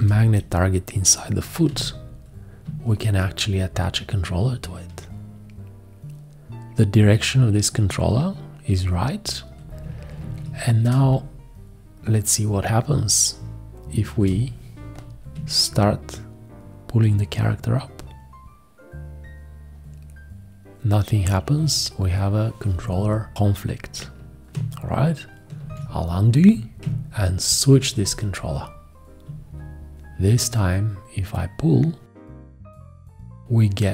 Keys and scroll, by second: 1.7 g, 10.2 ctrl+a, 11.0 space, 25.6 ctrl+z.